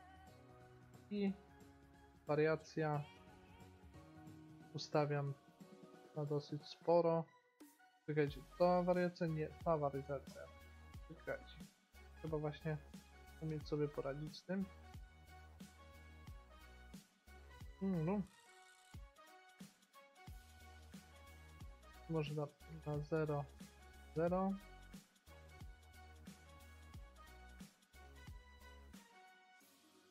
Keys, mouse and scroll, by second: 0.2-1.8 drag, 1.8 middle click, 2.7-4.5 drag, 8.4-9.9 drag, 9.9 middle click, 14.0 middle click, 14.2 middle click, 17.5-19.7 middle drag, 18.9-20.8 drag, 22.2-25.4 drag, 24.9 middle click, 26.2-30.1 drag.